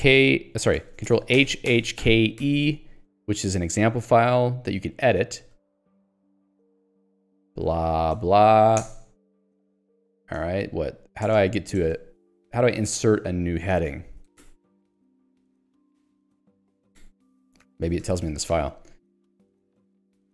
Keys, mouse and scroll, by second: 2.0 k, 2.5 e, 4.3 j, 5.4 k, 5.8 o, 6.4 Return, 7.3-10.9 typing, 9.8 Escape, 11.3 shift+Return, 12.3 Escape, 12.6-13.9 typing, 15.0 ctrl+g, 15.9 Escape, 17.8 ctrl+g, 18.3 Escape.